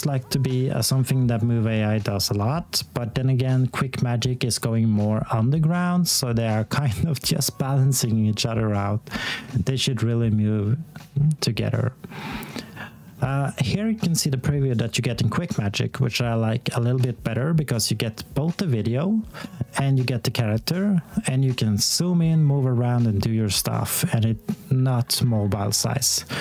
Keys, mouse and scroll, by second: 4.8 click, 15.1-17.5 scroll up 1.